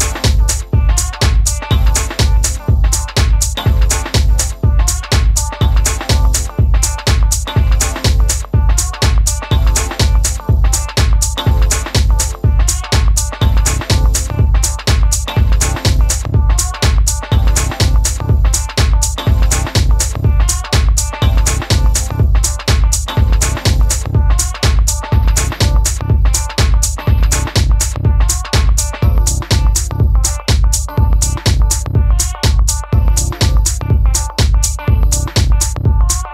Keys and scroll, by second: 0.8 Down, 0.9 Down, 0.9 Down, 1.0 Down, 1.9 Down, 2.0 Down, 2.6 Left, 2.8 Left, 2.9 Left, 3.8 Down, 3.9 Down, 3.9 Down, 4.9 Right, 5.0 Right, 5.1 Down, 5.3 Right, 20.9 Left, 24.8 Left, 24.9 BackSpace, 28.6-29.4 typing, 32.0-32.8 typing.